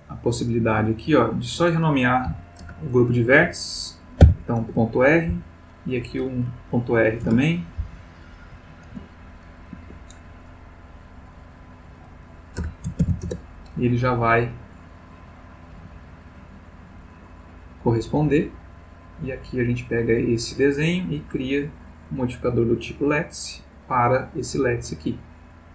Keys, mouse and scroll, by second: 0.3 click, 1.1 click, 2.3 End, 2.6 BackSpace, 4.2 shift+r, 4.6 shift+Return, 5.3 Down, 7.2 Return, 7.8 Down, 8.9 space, 9.7 Escape, 10.8 click, 11.6 click, 12.6 BackSpace, 13.0 shift+r, 13.2 Return, 15.0 click, 15.8 g, 18.2 Escape, 18.8 click, 19.7 click, 21.3 click, 21.9 click, 22.7 click, 23.8 click, 24.9 click.